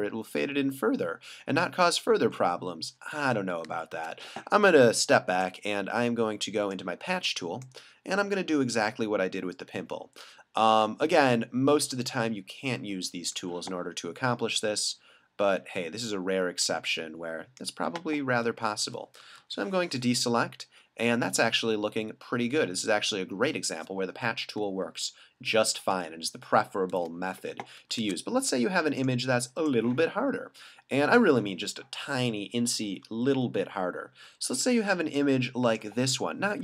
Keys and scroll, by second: 3.2 alt+super+z, 19.4 super+d, 25.8 super+w, 26.9 super+d, 28.1 super+Tab, 33.1 super+=, 34.3 super+=, 35.0 space.